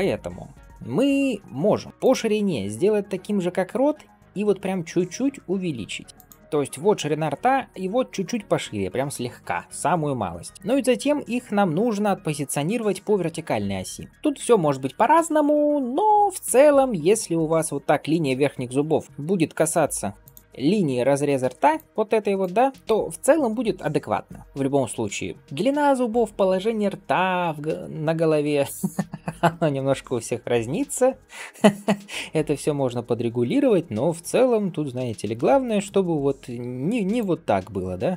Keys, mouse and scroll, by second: 1.6 s, 14.1 shift+middle click, 14.1-14.6 scroll down 1, 15.8 scroll up 1, 17.0-19.1 scroll up 1, 19.1 g, 21.6 click, 22.3-22.7 d, 22.7 right click, 22.8 d, 22.8 d, 25.1 scroll down 1, 25.4-27.6 scroll up 1, 31.9 scroll down 1, 32.3-33.4 scroll up 1, 35.1 scroll down 1, 35.6 g.